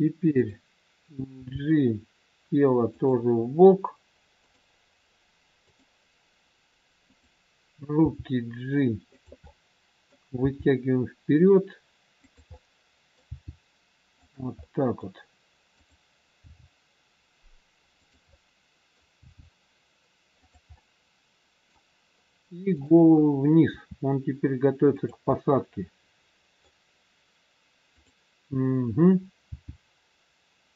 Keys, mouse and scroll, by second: 0.4 middle click, 0.4 click, 1.3 g, 7.0 click, 8.0 g, 9.4 middle click, 10.4 g, 12.5 middle click, 12.5 scroll up 1, 13.2 g, 14.6 middle click, 15.7 click, 16.6 g, 18.2 middle click, 19.1 g, 20.7 middle click, 22.8 click, 23.8 r, 25.3 middle click, 28.0 click, 29.5 g.